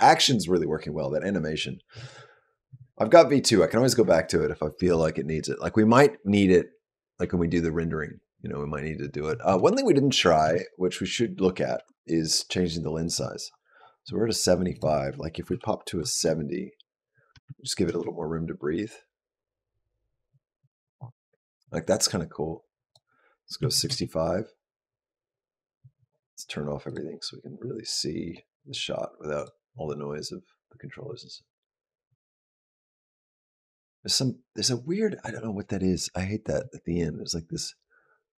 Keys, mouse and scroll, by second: 10.2 space, 10.9 click, 11.6 space, 12.9 click, 13.2-14.3 scroll up 5, 14.5 click, 17.0 space, 17.2 space, 17.7 space, 22.7 click, 26.7 click, 28.1 click, 29.2 click.